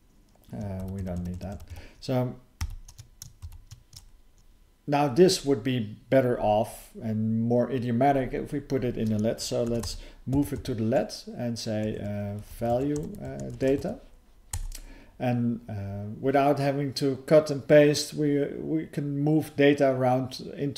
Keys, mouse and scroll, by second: 2.6 ctrl+alt+b, 12.0-12.4 typing, 14.5 Return.